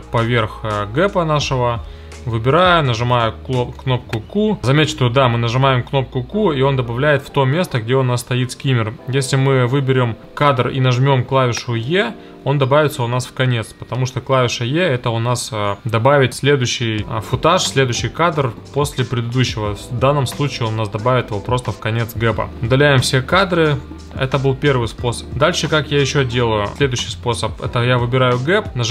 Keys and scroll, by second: 1.1 q, 2.6 q, 11.8 e, 22.5 BackSpace, 24.8 BackSpace.